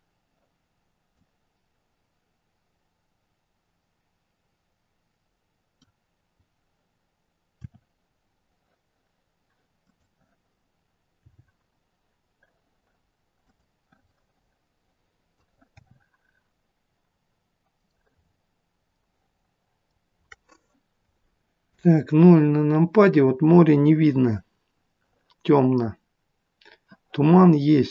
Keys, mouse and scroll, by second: 1.0 click, 7.6 r, 11.2 g, 14.1 middle click, 15.8 r, 18.2 scroll up 4, 18.8-19.2 scroll up 3, 20.4-21.4 scroll up 1, 21.8 KP_0.